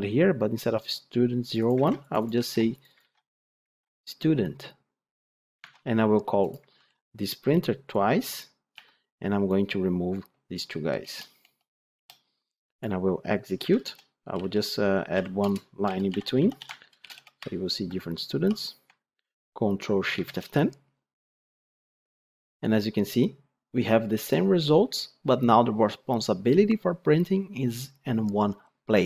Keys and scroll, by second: 5.5 ctrl+Tab, 6.6 ctrl+d, 16.6 Tab, 20.1 ctrl+shift+F10.